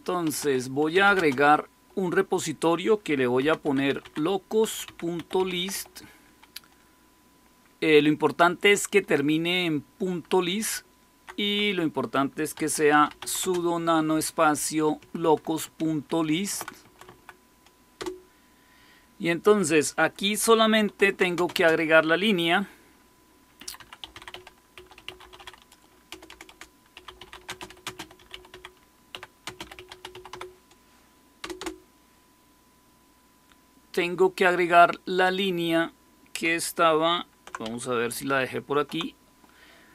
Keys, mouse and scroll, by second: 0.0-1.3 typing, 3.1-6.1 typing, 10.3 Left, 10.8 Left, 10.9 Left, 11.4 Left, 12.2-13.6 typing, 14.9 Right, 15.1 Right, 15.3 Right, 15.5 Right, 15.8 Right, 16.2 Right, 16.2 Right, 16.4 Right, 17.0 Right, 17.9 Return, 17.9 typing, 20.5-21.4 typing, 23.3-32.0 typing, 35.1 click, 38.0 super+8.